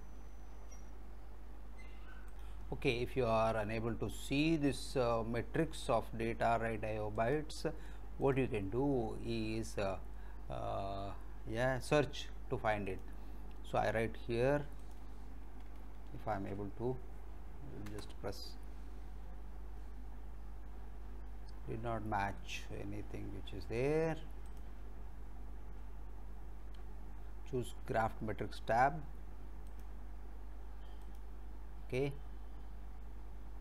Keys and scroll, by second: 16.3 ctrl+v, 17.9 Return.